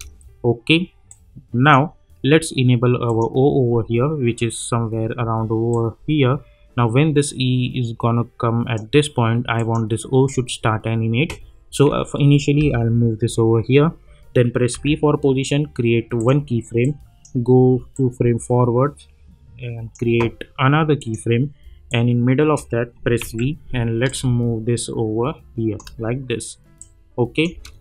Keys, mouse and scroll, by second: 1.1-3.0 drag, 5.7-9.6 drag, 12.6 [, 14.7 p, 16.1-23.2 drag, 23.2 v, 24.1-27.6 drag, 27.6 space.